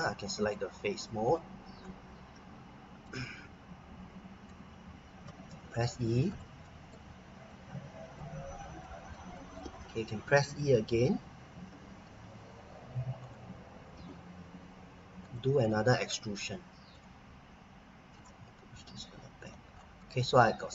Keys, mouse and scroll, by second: 0.4 click, 1.7-2.1 scroll down 1, 3.0 middle click, 5.2 e, 6.3 click, 6.6 middle click, 7.5 click, 8.8 middle click, 9.4 middle click, 11.6 r, 13.2 click, 13.9 e, 15.2 click, 15.6 middle click, 16.9 click, 19.7-20.0 scroll down 1, 20.0 middle click.